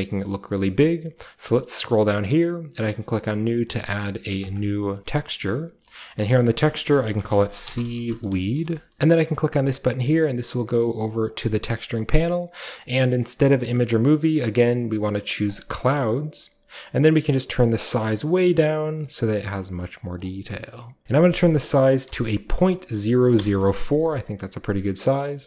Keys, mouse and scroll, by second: 0.1-1.3 scroll down 1, 1.3-3.8 scroll down 1, 3.8-4.4 scroll down 1, 4.4 click, 4.9-6.2 scroll down 1, 6.2-7.6 drag, 7.6-8.9 typing, 11.3-13.3 drag, 13.3-13.9 scroll up 1, 13.9-15.4 scroll up 1, 13.9-15.6 drag, 15.4 scroll up 1, 17.1-18.1 drag, 18.1-20.2 shift+drag, 23.2 typing, 23.4 Return, 24.1-24.4 scroll down 1, 24.2-25.4 middle drag, 24.4-25.4 scroll up 1.